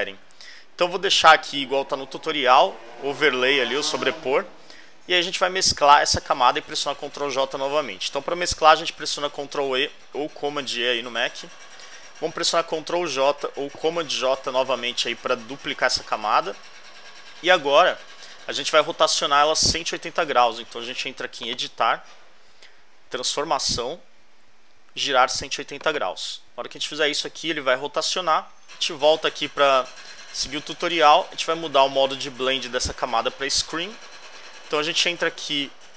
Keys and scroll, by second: 0.7 alt+Left, 6.4 alt+Right, 11.1 super+e, 15.7 super+j, 17.9 alt+Left, 19.3 alt+Right.